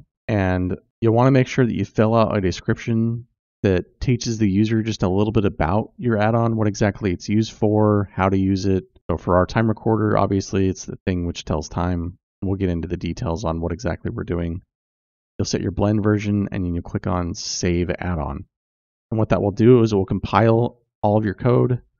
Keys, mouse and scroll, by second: 0.5-1.3 scroll down 7, 4.5-15.0 drag, 10.1 l.